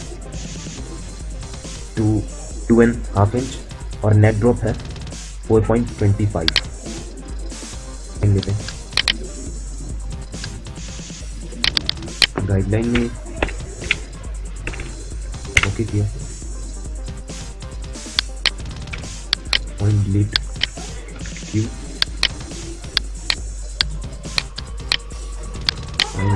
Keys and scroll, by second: 12.4-15.0 typing, 15.3 Return, 18.7 Delete, 20.3 Delete, 21.0 q.